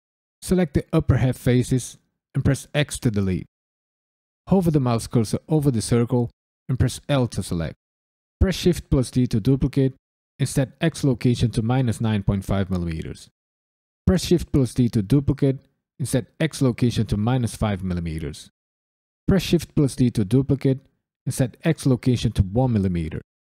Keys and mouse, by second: 0.1 drag, 2.0 x, 4.4 Tab, 4.8 KP_Decimal, 5.2-5.9 ctrl+middle drag, 5.2 ctrl+right click, 6.4 Tab, 7.0 l, 8.4 shift+d, 9.3 right click, 10.9-12.4 drag, 14.0 shift+d, 15.5-16.5 right drag, 16.5-17.6 drag, 19.2 shift+d, 20.4-21.5 right drag, 21.7 click.